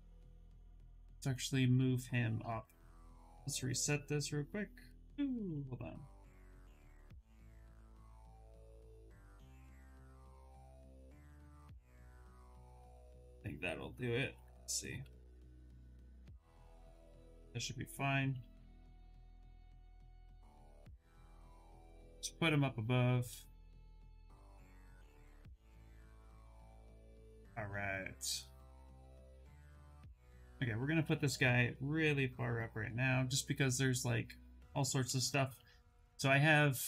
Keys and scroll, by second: 1.8 w, 8.1 q, 17.2 2, 18.0 w, 35.2 q.